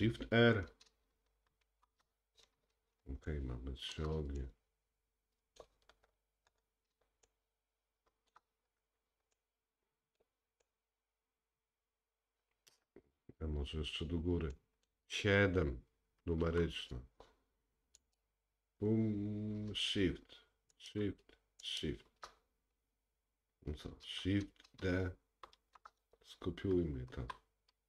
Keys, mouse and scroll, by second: 1.7 shift+r, 3.3-16.5 shift+middle drag, 6.0-6.8 scroll up 6, 8.9-9.4 scroll down 2, 13.2-13.7 scroll down 2, 14.6-16.0 scroll down 1, 16.5 KP_7, 18.0 click, 20.8 shift+click, 21.7 shift+click, 25.6 shift+d.